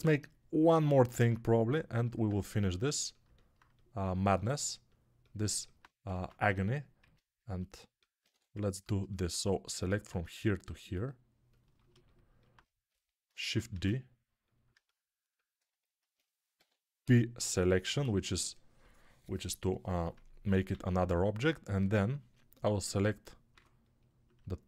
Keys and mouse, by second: 6.0 ctrl+Tab, 6.9-8.1 drag, 8.1-11.6 right drag, 8.2 3, 11.6-15.7 alt+shift+drag, 13.6 shift+d, 15.7-24.6 alt+right drag, 16.4 p, 20.6 alt+q, 21.7 3, 23.4 2.